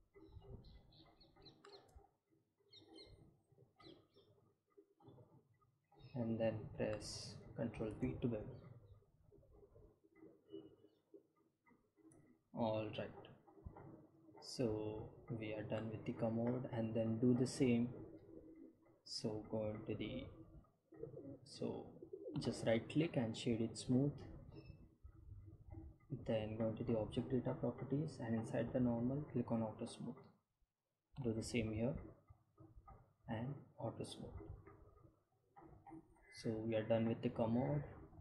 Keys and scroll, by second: 6.3 ctrl+b, 10.9 Tab.